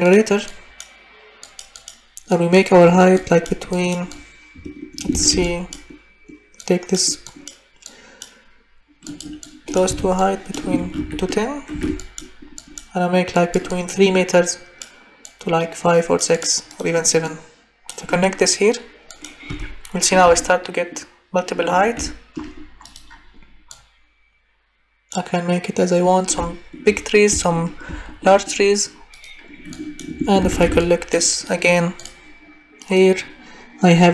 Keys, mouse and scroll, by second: 3.2 click, 3.8 click, 4.2 click, 5.1 ctrl+c, 5.4 ctrl+v, 5.5 click, 6.7 click, 7.2 click, 7.9 click, 9.1 click, 9.8 Delete, 10.9 ctrl+c, 11.7 ctrl+v, 19.2 click, 19.5 Delete, 22.9 click, 23.8 click, 30.4 ctrl+c, 30.7 ctrl+v.